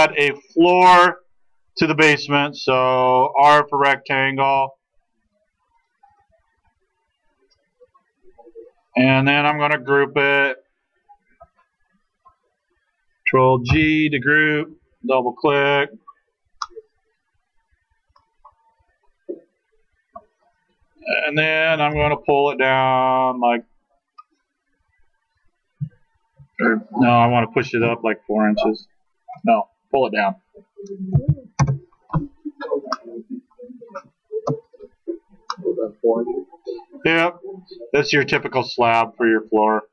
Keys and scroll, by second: 4.5 r, 9.4 space, 13.7 ctrl+g, 21.9 p, 31.2 4, 31.6 Return, 34.3 space.